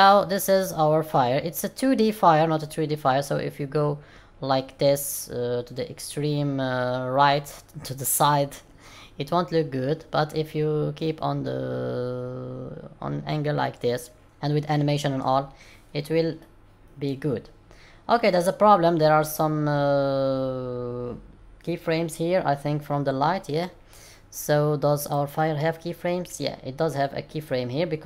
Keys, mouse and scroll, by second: 0.0-0.9 scroll up 6, 0.9 scroll up 2, 1.0 middle click, 16.3 middle click, 17.5 scroll down 1, 17.8-18.9 scroll up 1, 25.0 click.